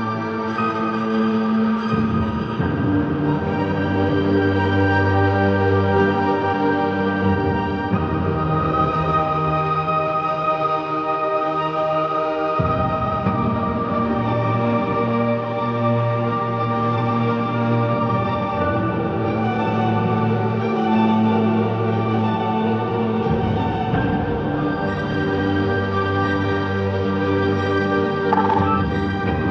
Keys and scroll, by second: 1.0 space, 2.3 ctrl+z, 3.5 typing, 4.8 ctrl+z, 6.9 space, 7.5 ctrl+z, 8.0 space, 9.6 space, 12.6 ctrl+KP_Subtract, 15.1 ctrl+KP_Add, 15.3 ctrl+space, 19.0 b, 21.3-21.9 typing, 22.7 ctrl+d, 28.3-29.5 typing, 28.7 Return.